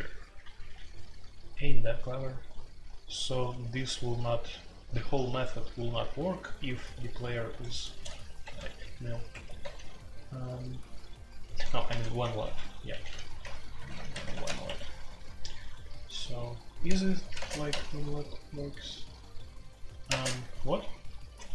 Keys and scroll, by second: 0.0-0.7 typing, 4.2-5.0 j, 5.0-5.9 k, 6.1 k, 7.5 x, 7.9 shift+a, 9.3 Escape, 9.6 j, 11.4-15.1 typing, 17.3 space, 17.4 g, 20.0-20.4 typing.